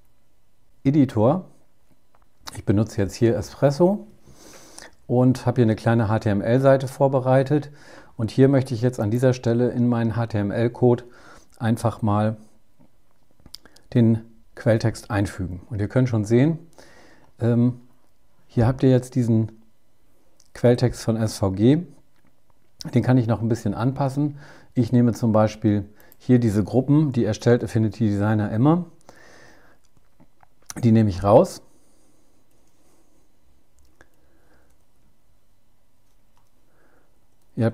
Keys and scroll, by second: 14.1 super+v, 26.7 super+Left, 35.3 Delete.